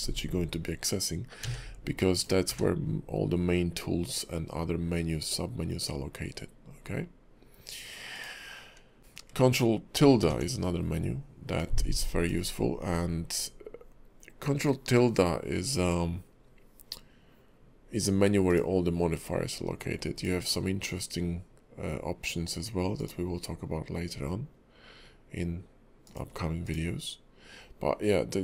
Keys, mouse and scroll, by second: 1.4 q, 2.1 click, 2.4 q, 8.1 click, 9.0 ctrl+`, 10.2 ctrl+`.